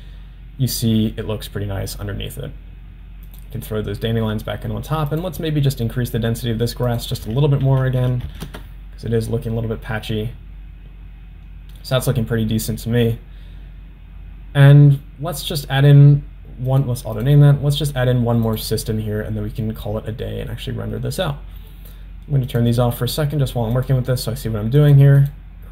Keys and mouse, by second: 3.6 click, 5.4 click, 6.9-10.1 drag, 16.7-17.8 drag, 18.6-19.9 drag, 22.8 click, 23.2 click, 23.9 click, 24.9 click, 25.2 click.